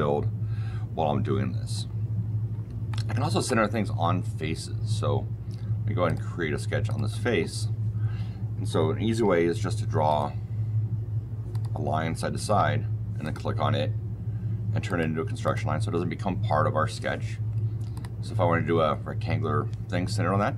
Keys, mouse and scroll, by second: 2.8-3.3 shift+middle click, 3.1 shift+middle click, 3.2 shift+middle click, 6.0 click, 6.8 click, 9.1 l, 10.0 click, 11.4 click, 12.3 Escape, 12.4 Escape, 13.1 click, 14.8 click, 15.3 click, 17.8 click.